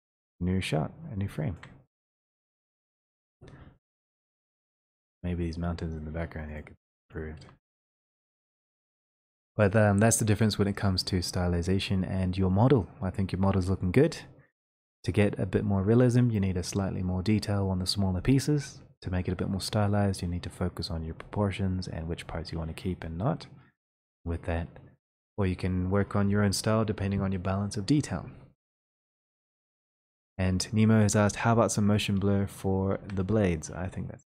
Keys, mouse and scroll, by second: 1.7 shift+click, 2.9 shift+middle click, 4.7 click, 6.7 click, 7.1 click, 8.8 click, 10.4 click, 32.1 click, 33.0 click, 33.7 click.